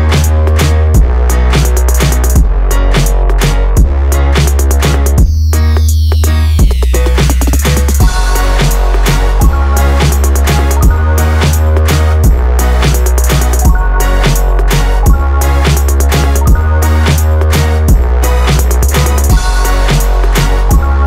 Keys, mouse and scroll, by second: 1.2-5.7 drag, 8.1 KP_7, 9.5-12.4 drag, 13.4 click, 16.8-18.7 drag, 20.0 click, 20.6 click.